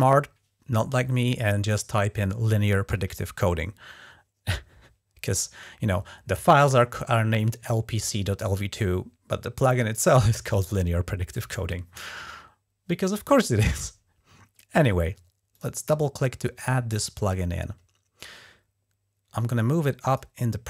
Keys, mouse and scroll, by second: 15.3 click, 16.4 click, 19.2-20.0 drag.